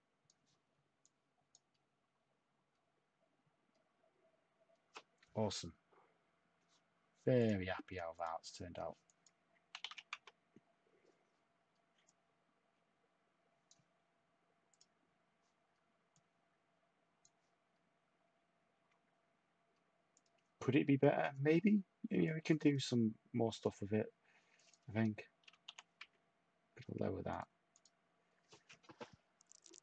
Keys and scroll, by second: 9.8 3, 10.1 Tab, 10.1 2, 25.2-26.2 typing.